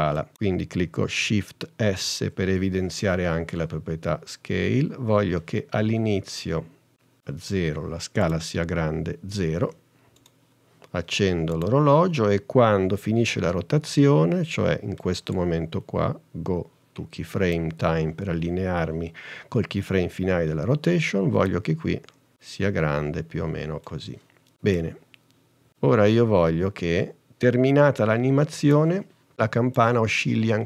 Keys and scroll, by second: 2.0 shift+s, 9.7 0.